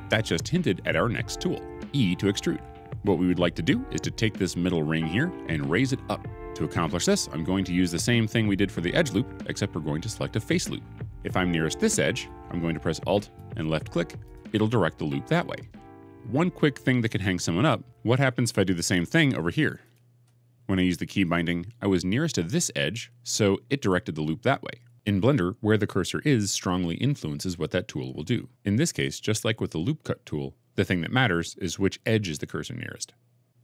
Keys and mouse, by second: 14.1 alt+click.